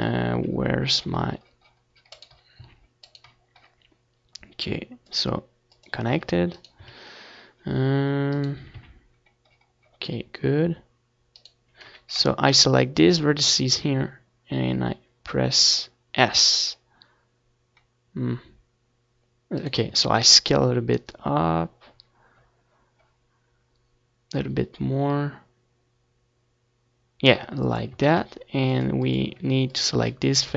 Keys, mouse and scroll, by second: 1.1-2.9 right drag, 1.3 s, 7.5-9.5 right drag, 7.8 s, 16.1-19.4 drag, 16.3 a, 17.6 c, 19.1-21.6 right drag, 19.3 s, 21.6-22.8 middle drag, 22.8-24.8 drag, 25.0 s, 26.1-30.5 drag, 26.2 z, 26.9 Tab, 28.6 s.